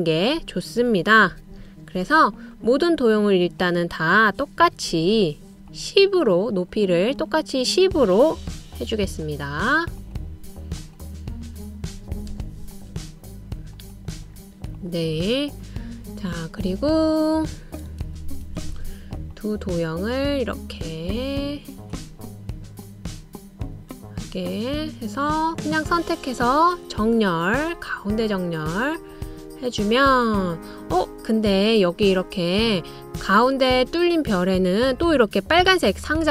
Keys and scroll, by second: 1.9 1, 2.4 0, 2.8 Return, 5.2 1, 5.7 0, 6.1 Return, 8.7 1, 9.3 0, 9.6 Return, 12.6-13.1 typing, 13.4 Return, 16.5 typing, 19.2 super+c, 19.6 super+v.